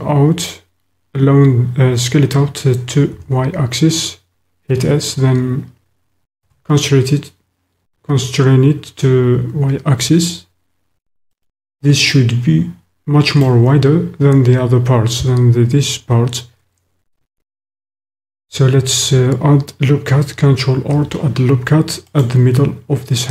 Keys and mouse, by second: 3.1 s, 6.5 y, 11.3 click, 12.1 click, 12.4 middle click, 12.8 middle click, 13.0 middle click, 13.1 click, 20.7 ctrl+r.